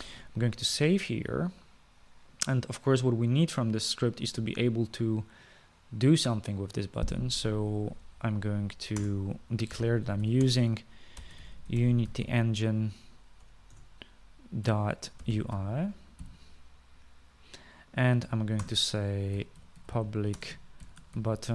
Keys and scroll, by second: 1.0 ctrl+s, 10.1 Return, 10.7-13.9 typing, 14.9 Return, 15.6-17.4 typing, 19.8 Return, 20.3-21.5 typing.